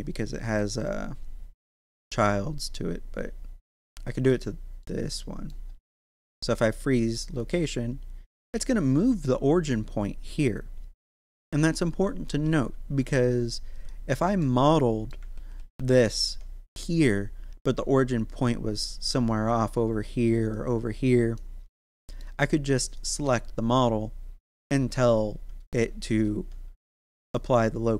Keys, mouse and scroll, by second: 1.6-3.5 scroll up 1, 4.1 right click, 4.8 middle click, 5.7 scroll down 1, 6.2 ctrl+a, 7.3 click, 8.4 scroll up 1, 12.4 ctrl+z, 13.2-13.7 scroll down 1, 13.7 right click, 14.4 middle click, 15.3 ctrl+z, 19.6 click, 21.4-22.8 middle drag, 22.8 right click, 26.1 ctrl+a, 27.3 click.